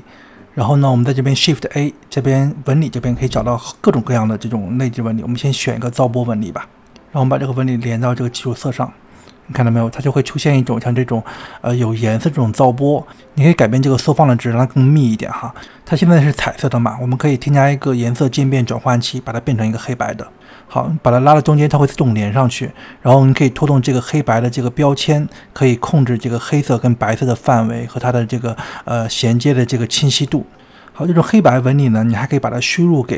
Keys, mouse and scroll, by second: 0.0-1.1 drag, 1.1-1.8 middle drag, 1.8 click, 2.7 shift+a, 7.1 scroll up 2, 8.1 drag, 10.8 scroll down 1, 11.1-12.3 scroll up 2, 12.6-14.6 drag, 15.0 click, 16.0 click, 16.9 shift+a, 22.3-24.4 drag, 24.9-27.9 drag, 28.1-29.0 drag, 29.0-29.3 middle drag, 29.3-29.6 scroll up 2, 29.6-31.1 middle drag, 32.3 drag.